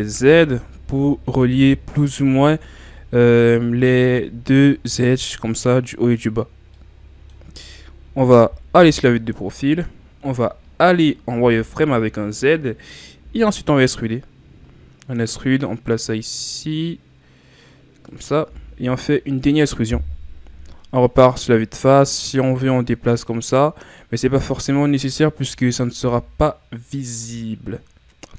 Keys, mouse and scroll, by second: 0.2-1.0 scroll down 5, 1.0-4.2 scroll up 5, 6.6 scroll down 3, 6.8 middle click, 7.5-8.8 scroll up 2, 8.8 KP_3, 11.5 z, 13.3 e, 18.5 e, 20.4 KP_1, 22.1-24.2 drag, 24.2 z, 24.8-25.5 scroll down 4, 25.5 Tab, 26.0 a, 26.2-27.0 scroll down 5, 27.0-28.2 scroll up 8, 28.2 scroll down 1.